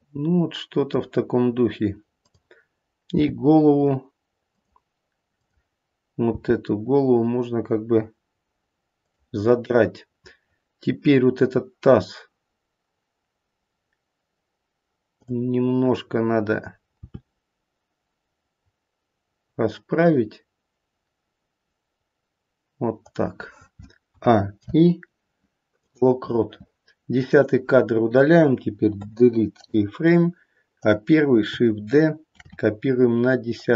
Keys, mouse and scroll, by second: 2.1 click, 3.1 g, 5.8 click, 6.2 g, 15.1 click, 17.0 r, 24.0 a, 24.5 i, 27.2 click, 28.9 Delete, 30.7 click, 32.3 shift+d.